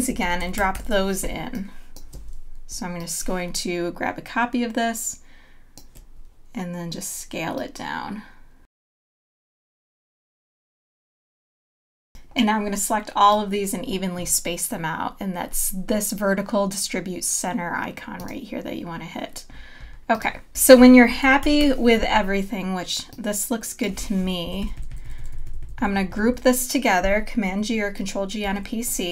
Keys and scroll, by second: 0.5 super+-, 1.2 space, 9.3 space, 21.6 super+-, 24.4 Up, 28.4 super+g.